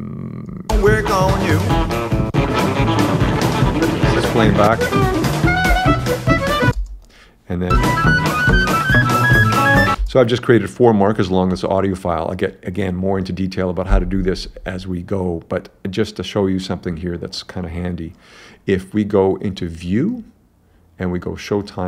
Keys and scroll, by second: 0.7 space, 1.7 s, 3.6 s, 5.7 s, 7.5 space, 8.5 s, 10.0 space.